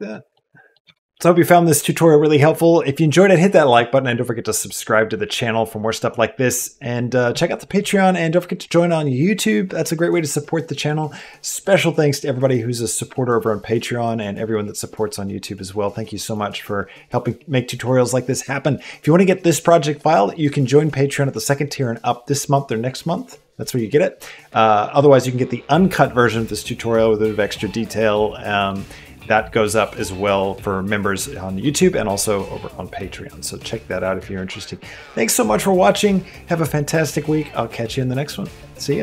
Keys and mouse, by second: 0.1 middle click, 0.5 click, 0.7 g, 38.9 click.